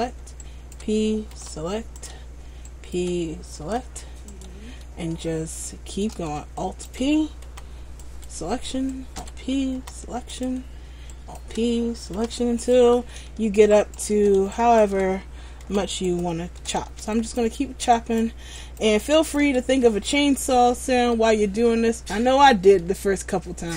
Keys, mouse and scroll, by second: 0.5 alt+right click, 1.5 p, 2.9 alt+right click, 3.8 p, 5.3 shift+middle click, 6.8 alt+right click, 7.6 p, 9.0 alt+right click, 9.9 p, 11.3 alt+right click, 12.4 p, 13.9 alt+right click, 14.7 alt+right click, 15.8 p, 17.3 alt+right click, 18.1 alt+right click, 18.7 alt+right click, 19.3 alt+right click, 20.0 middle click, 22.5 scroll up 3, 23.0 middle click.